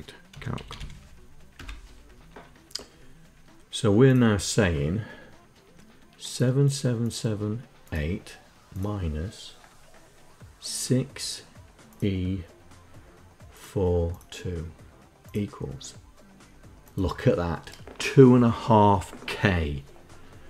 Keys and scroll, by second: 0.0-0.8 typing, 1.2 Return.